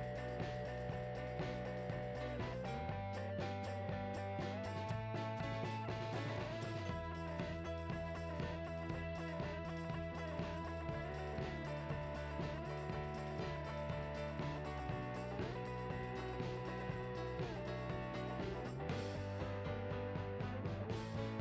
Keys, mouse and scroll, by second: 0.6 click, 0.8 KP_Decimal, 1.3 scroll down 1, 2.0 g, 2.8 scroll down 1, 3.0-3.6 scroll up 1, 3.7 ctrl+a, 3.8 Tab, 4.2 right click, 5.1-7.2 drag, 6.2 KP_0, 7.2 Tab, 7.8-11.4 drag, 11.4 z, 12.0 click, 12.2 z, 12.3 Tab, 12.5 2, 13.0 ctrl+b, 15.0 click, 15.1 g, 16.1 Tab, 16.6 Tab, 16.8 g, 17.3 click, 17.5 alt+click, 17.8 e, 18.0 s, 19.0 Tab, 19.1-21.4 typing, 19.3 Tab, 19.3-20.4 drag, 21.3 click.